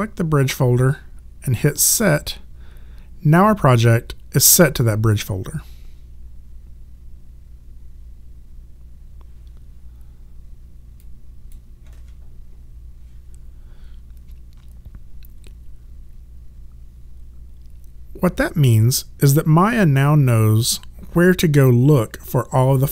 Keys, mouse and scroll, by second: 2.0 click, 11.0 click.